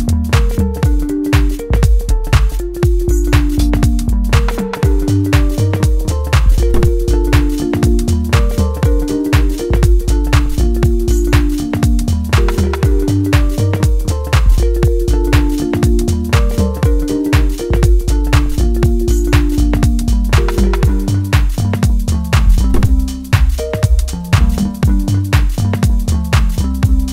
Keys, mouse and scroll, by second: 1.2 scroll down 1, 1.6 shift+middle click, 2.7-3.1 scroll up 1, 3.1-5.8 middle drag, 5.8-7.0 scroll up 1, 7.0-8.0 scroll down 1, 8.0-9.6 right drag, 9.6-13.9 drag, 14.3-15.0 scroll up 1, 15.1 shift+middle click, 16.9-18.6 scroll down 1, 18.6 right click, 18.8-20.5 right drag, 20.5 middle click, 21.8 click, 25.7-27.1 middle drag.